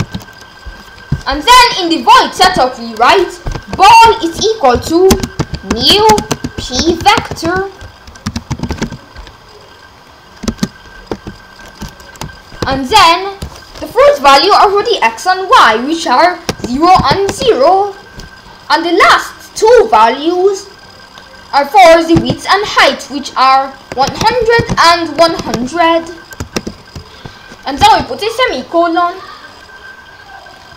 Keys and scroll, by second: 0.0 ;, 2.5 Return, 3.6 b, 4.0 a, 5.2 space, 5.5 n, 5.7 e, 7.1-9.4 typing, 10.5 space, 11.1 =, 12.6 shift+9, 16.5 0, 17.0 ,, 17.3 0, 22.1 ,, 23.6-26.6 typing, 27.8 ;.